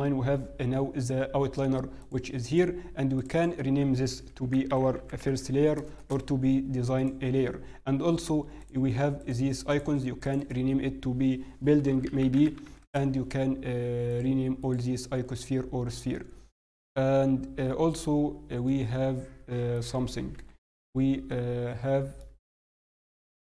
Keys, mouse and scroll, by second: 2.0 click, 6.9 click, 14.0 click, 17.3 click, 17.3 scroll down 1, 18.6 middle click, 20.3 KP_7, 20.8-21.8 scroll down 1, 22.2 shift+middle click, 22.2-22.7 scroll down 3.